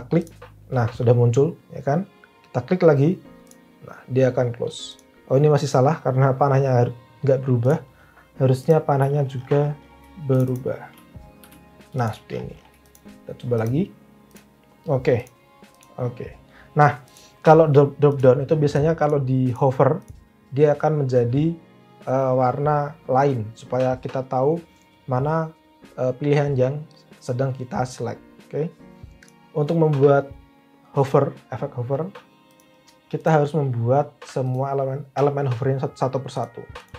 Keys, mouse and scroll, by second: 11.4 v.